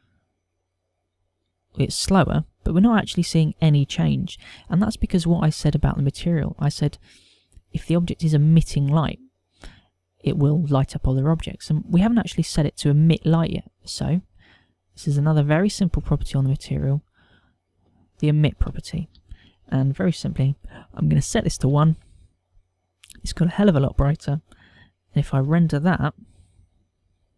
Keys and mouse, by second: 0.4 F12, 15.8 click, 17.4 click, 20.2 ctrl+click, 26.7 F12.